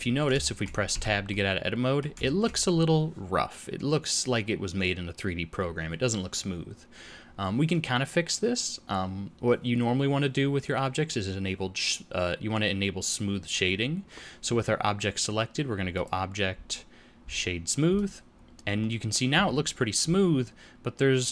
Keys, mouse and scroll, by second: 0.4 shift+middle click, 0.8 Tab, 1.2 middle click, 2.2 shift+middle click, 15.9 click, 18.7 middle click.